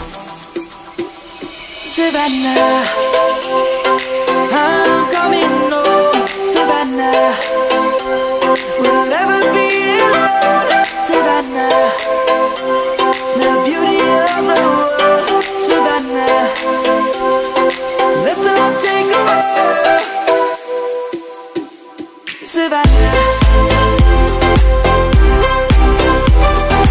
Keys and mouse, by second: 9.3 Tab, 10.8 middle click, 13.2 middle click, 14.4 click, 14.6 Tab, 15.5 click, 21.8 Tab, 26.0 click, 26.5 Tab.